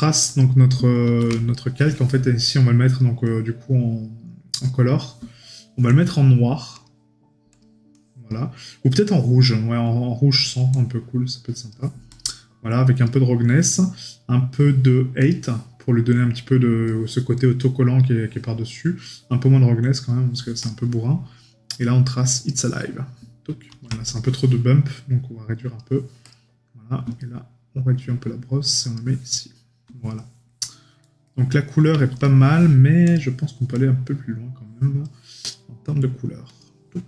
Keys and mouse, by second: 1.5 right click, 24.0 right click, 27.2 right click, 30.1 right click, 31.2 middle click.